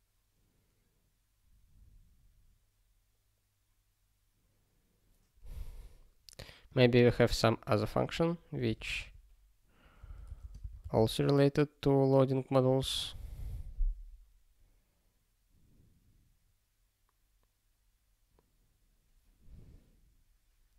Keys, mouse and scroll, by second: 6.6 click, 8.0 click.